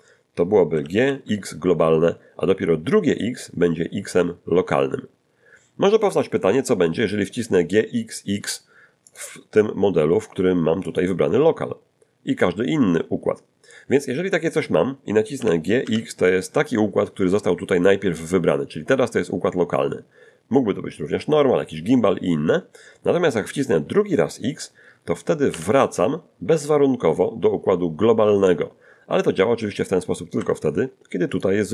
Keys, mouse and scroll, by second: 0.8 g, 1.1 x, 3.3 x, 6.0 Escape, 9.1 click, 10.9 click, 15.4 g, 15.8 x, 25.5 x, 30.4 Escape, 31.3 click.